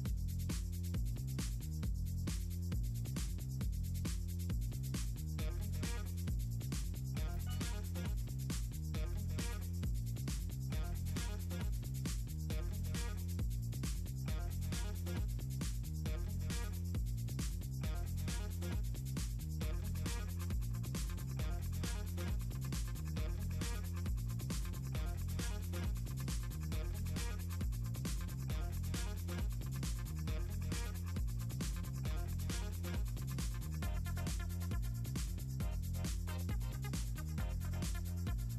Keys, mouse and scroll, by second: 0.4 click, 0.6 click, 0.8 click, 1.0 click, 1.2 middle click, 2.5 click, 2.8 middle click, 3.1 click, 3.6 click, 6.7 click, 8.0 click, 9.1 click, 9.9 click, 11.1 click, 12.6 click, 15.0 click, 15.3 shift+click, 16.0 shift+click, 16.9 click, 18.0 shift+click, 19.9 click, 20.2 click, 20.4 click, 20.8 click, 21.5 click, 21.8 click, 22.2 click, 22.7 click, 23.0 click, 23.4 shift+click, 23.9 shift+click, 25.6 click, 26.4-28.1 drag, 28.8 shift+click, 30.1 click, 31.3 click, 31.5 click, 31.8 click, 35.8 click, 36.4 click.